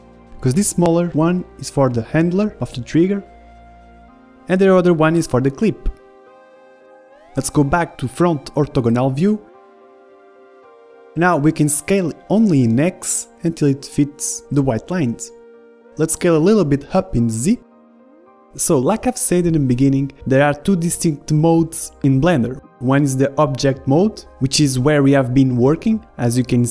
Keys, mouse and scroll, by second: 0.8-3.8 middle drag, 5.8-7.2 middle drag, 7.4-9.4 middle drag, 8.0 s, 9.7 middle click, 10.3 KP_1, 11.4-13.2 middle drag, 12.0 s, 13.2 s, 14.4-18.1 middle drag, 16.6 s, 18.4-20.2 middle drag.